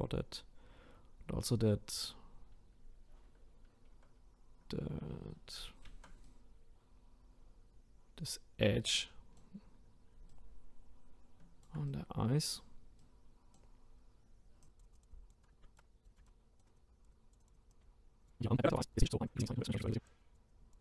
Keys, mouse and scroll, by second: 10.2-14.6 ctrl+right drag, 14.6-15.5 drag, 15.5-16.7 ctrl+shift+right drag, 16.7-17.9 drag, 17.9 scroll down 1, 18.2-18.6 drag, 19.2-20.8 drag.